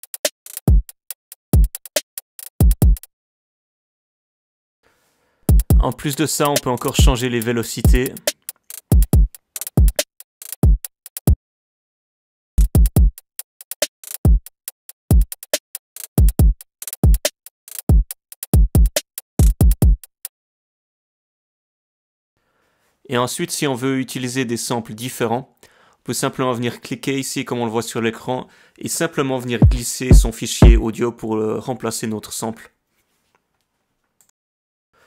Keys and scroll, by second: 3.2 alt+Down, 3.2 alt+Down, 3.4 alt+o, 4.0 alt+Down, 4.3 alt+Down, 4.7 alt+Down, 11.2 space, 11.6 space, 11.8 space, 21.1-22.3 typing.